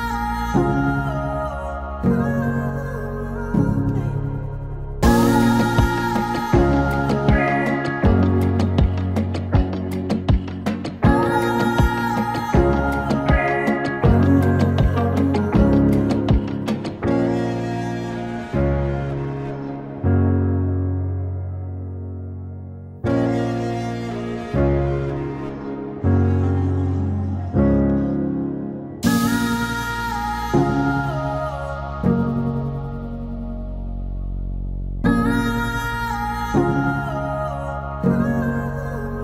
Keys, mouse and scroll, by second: 0.8 p, 1.7 click, 2.6 right click, 3.7 click, 6.6 ctrl+shift+d, 7.6 click, 8.4 c, 10.3-12.1 typing, 12.5 Return, 14.4-20.9 drag, 20.9 space, 22.1 space, 25.0 shift+click, 27.4 ctrl+shift+c, 31.1-34.3 typing, 34.7 Return, 37.2 d.